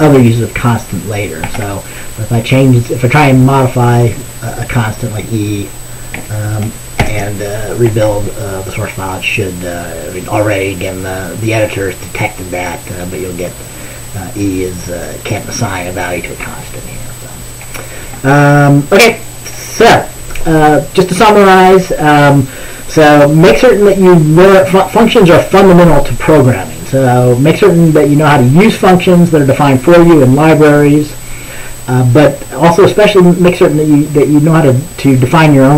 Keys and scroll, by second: 1.5 ctrl+s, 7.1 ctrl+b.